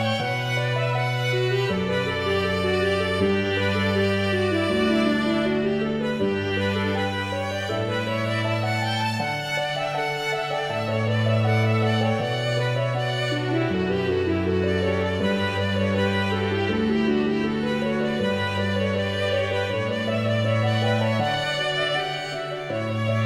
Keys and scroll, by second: 2.8 shift+a.